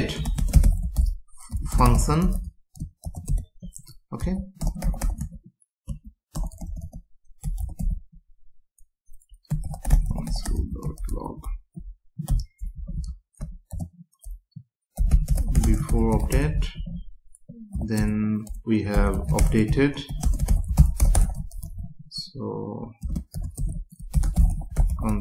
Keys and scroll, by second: 0.4 space, 3.3 Return, 4.6 BackSpace, 5.2 Tab, 6.3 BackSpace, 12.7 Left, 15.6 space, 16.7 Down, 18.0 Return, 20.2 space, 23.0 space, 23.6 Return.